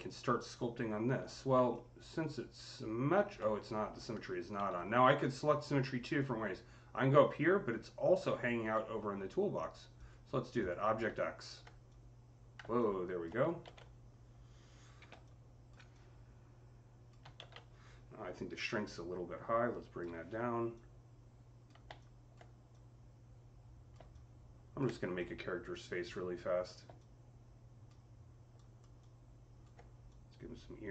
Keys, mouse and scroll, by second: 1.5-7.1 alt+drag, 4.4 ctrl+z, 9.8 alt+click, 9.8 z, 10.4 click, 11.0-15.1 drag, 13.5 ctrl+z, 14.9-15.5 typing, 15.1-18.5 drag, 17.2 z, 18.3-19.5 typing, 20.5 click, 20.5 typing, 21.8-28.9 alt+drag, 21.8 typing, 28.5 alt+right click, 28.9-30.9 alt+drag.